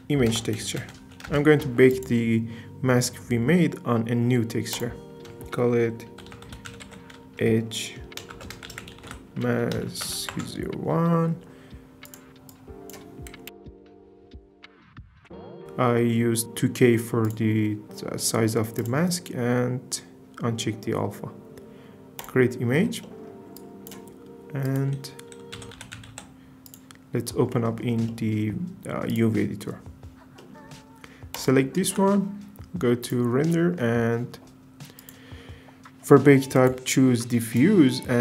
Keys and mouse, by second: 1.9 click, 1.9 typing, 4.8-22.3 drag, 24.8-26.9 drag, 27.5 middle click, 29.1 click, 31.3 click, 31.8 z, 33.0 click, 35.1 click, 36.7-37.6 drag.